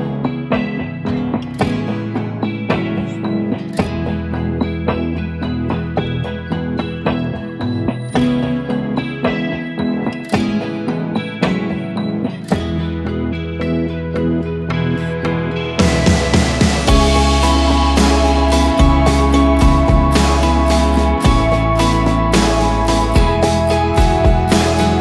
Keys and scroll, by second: 10.7 ctrl+z, 14.1 ctrl+z.